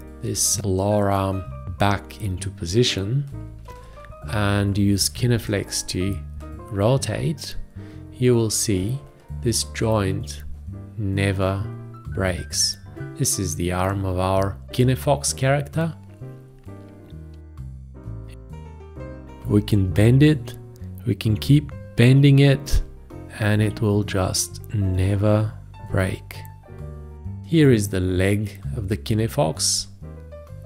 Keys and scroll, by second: 3.7 ctrl+a, 5.0 g, 27.1 space.